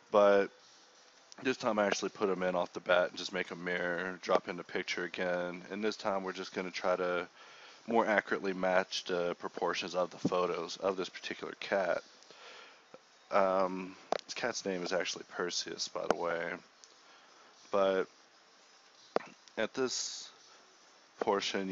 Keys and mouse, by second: 0.2 click, 0.6 KP_1, 1.2 middle click, 1.4 ctrl+Tab, 2.2 ctrl+i, 2.4-8.3 typing, 8.1 click, 8.5 shift+Tab, 9.2-9.7 drag, 10.4 a, 10.6 a, 10.6 g, 12.0 z, 12.8 Tab, 13.3 KP_1, 13.8 z, 14.2 KP_Divide, 14.4 z, 14.6 z, 16.6-18.2 typing, 17.0 Tab, 17.6 Escape, 18.0 Tab, 19.7 Tab, 19.8 a, 20.1 a, 20.1 g, 20.4 Tab.